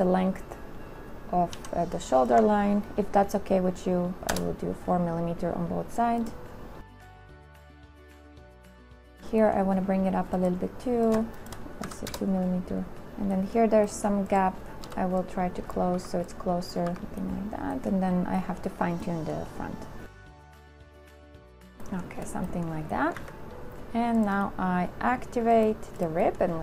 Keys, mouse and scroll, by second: 1.7 z, 2.5 ctrl+z, 3.5 ctrl+click, 3.9 right click, 4.5 KP_4, 4.8 Return, 7.2 click, 7.9 KP_4, 8.1 Return, 9.2 ctrl+z, 11.6 shift+right click, 12.1 KP_2, 12.4 Return, 15.0 v, 16.1 Delete, 20.8 Delete, 21.7 2, 23.3 a.